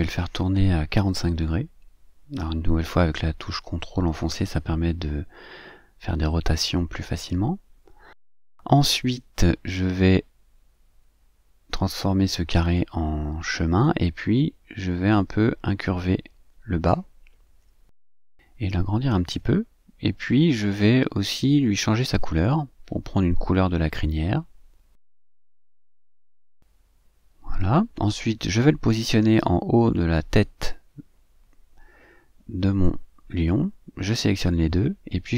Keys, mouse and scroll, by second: 0.6-3.9 ctrl+drag, 5.2 click, 5.7 click, 7.8-9.5 drag, 10.3 click, 11.8-13.6 drag, 14.2-16.9 drag, 18.2 click, 19.6-22.0 ctrl+drag, 25.4 click, 28.2-29.7 drag, 30.3-32.9 drag, 33.5 click, 34.5 shift+click.